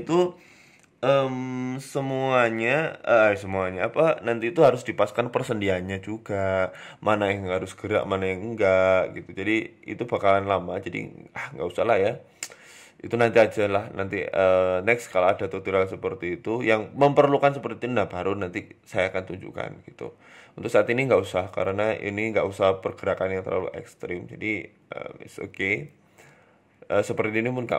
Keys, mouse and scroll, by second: 0.1 shift+middle click, 0.4-1.3 scroll up 3, 1.3 g, 2.4 r, 3.7 g, 4.4-5.4 scroll up 6, 4.7 shift+middle click, 5.3 shift+middle click, 5.9 right click, 6.4 shift+right click, 7.2 click, 7.4 click, 8.6 right click, 8.9 click, 9.7 r, 10.8 click, 11.3 r, 12.2 shift+middle click, 12.7 right click, 13.1 click, 14.1 r, 14.7 click, 15.3 r, 16.3 shift+middle click, 16.7 scroll down 2, 16.9 Tab, 17.4 Tab, 18.2 click, 19.1 shift+middle click, 19.1-19.6 scroll down 2, 19.9 right click, 20.8 shift+right click, 21.4 g, 22.5 scroll down 4, 22.7 shift+middle click, 23.3 right click, 23.5-23.8 scroll up 2, 23.8 scroll down 1, 24.5 shift+middle click, 24.7 middle click, 25.3-25.7 scroll up 2, 25.7 shift+middle click, 26.3 right click, 26.6 middle click.